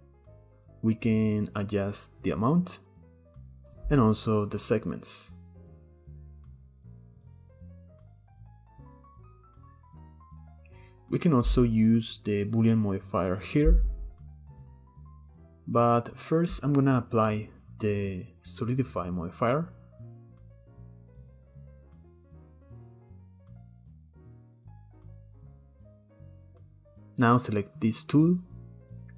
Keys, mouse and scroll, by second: 3.0 shift+click, 5.6-7.8 drag, 7.8 shift+middle click, 8.2 shift+click, 8.8 scroll down 3, 9.0 shift+middle click, 9.3 scroll up 3, 9.5-9.9 shift+middle drag, 10.5-11.5 scroll down 1, 11.5-13.5 scroll down 1, 14.1 shift+middle click, 14.5 click, 15.4-15.7 shift+middle drag, 16.8-20.3 scroll up 6, 20.8-23.5 drag, 24.3-25.4 shift+middle drag, 25.4-25.9 scroll up 3, 25.6 middle click, 26.0-26.7 shift+middle drag, 26.7 click.